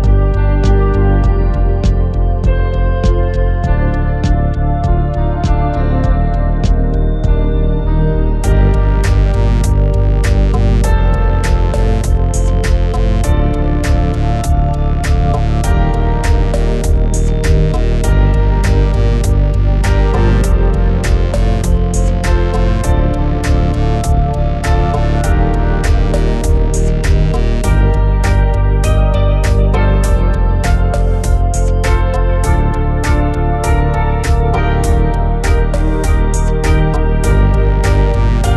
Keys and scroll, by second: 14.4-14.8 typing, 17.5 1, 18.8-19.5 typing.